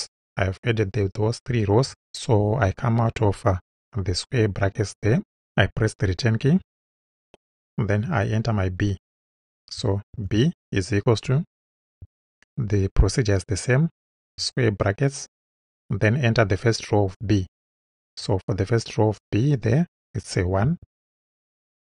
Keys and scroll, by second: 3.5 Right, 6.5 Return, 10.1 shift+b, 12.0 =, 14.2 [, 20.6 1, 21.1 space.